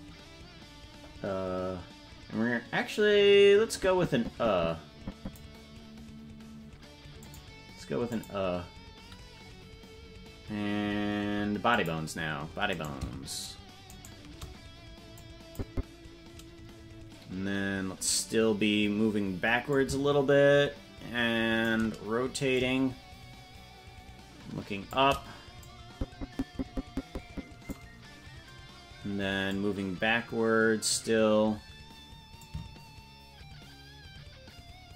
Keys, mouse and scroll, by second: 3.9-5.7 drag, 7.4 click, 8.6 click, 11.9 click, 13.3 right click, 14.2 shift+right click, 15.6 click, 17.7-19.0 scroll down 3, 19.9-22.1 drag, 22.8-25.3 drag, 26.0-28.0 drag, 29.6-31.3 drag, 32.8-34.9 shift+drag.